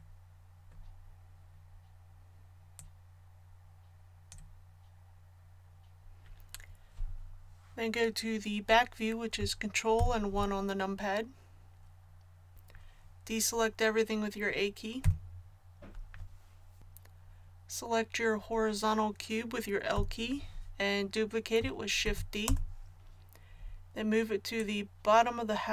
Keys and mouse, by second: 9.9 ctrl+KP_1, 15.0 a, 19.9 l, 22.0 shift+d, 24.5-25.7 drag.